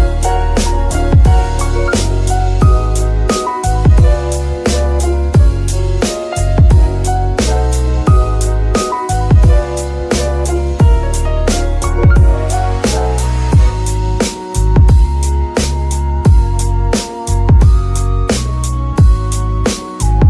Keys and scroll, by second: 0.0 g, 0.8 Escape, 4.6 s, 4.9 y, 7.6 shift+g, 8.2 Escape, 14.0 shift+a, 15.5 g, 16.5 Escape, 19.5 g, 19.9 Escape.